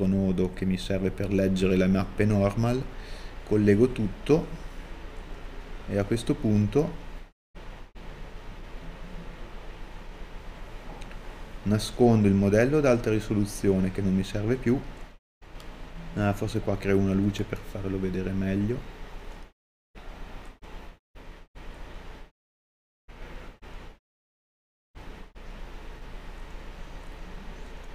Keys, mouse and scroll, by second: 6.2-9.0 middle drag, 8.6-9.0 scroll down 2, 11.2 middle click, 11.2-11.8 scroll down 2, 23.3-26.9 drag, 24.1 r, 25.6 g, 26.9 middle click.